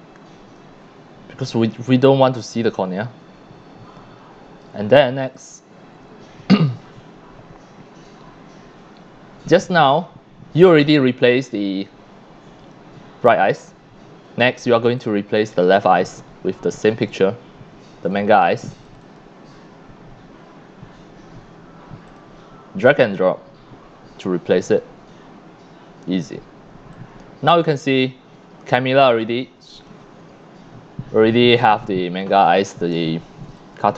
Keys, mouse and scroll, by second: 0.1-0.4 scroll up 2, 0.9 scroll down 1, 1.4 c, 1.5-4.6 drag, 4.9 scroll down 1, 5.3-6.8 drag, 5.3 x, 6.0 c, 6.7 c, 6.9 click, 6.9 scroll up 1, 8.1-9.2 scroll up 4, 9.7 scroll up 1, 11.3 click, 15.0 click, 16.1-17.2 drag, 18.1 click, 18.9 click, 19.0 click, 22.1 click, 23.0-24.8 drag, 26.9-27.6 drag, 27.7 click, 29.0 x, 29.1-29.8 drag, 29.6 c, 30.1-30.6 scroll up 4, 30.3 click, 30.5 click, 30.9 click, 31.3 scroll up 1, 31.4 click, 33.4 c, 33.6-33.9 drag.